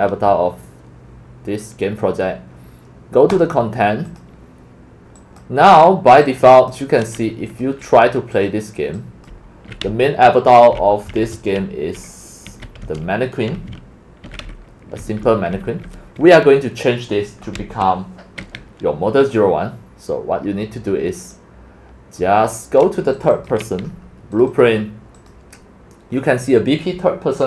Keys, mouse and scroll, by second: 3.4 click, 4.2 click, 5.1 click, 6.2 click, 7.4 click, 7.5 click, 8.3 click, 9.2-17.9 typing, 9.3 click, 21.3 click, 22.5-22.9 drag, 23.1 click, 23.3 click, 24.0 click, 24.4 click, 24.6 click, 25.3 click.